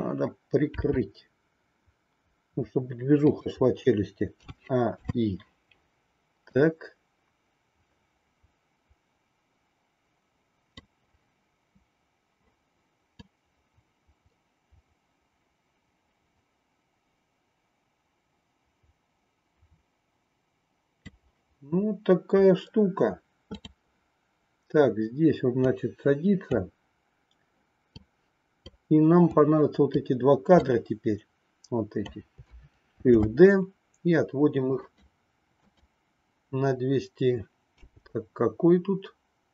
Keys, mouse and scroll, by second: 0.7 r, 4.4 a, 5.0 i, 6.5-10.9 drag, 13.2-21.2 drag, 23.6 click, 25.7 click, 28.0 click, 29.4 click, 30.6-32.0 drag, 33.0 shift+d, 35.7 click, 37.9 g.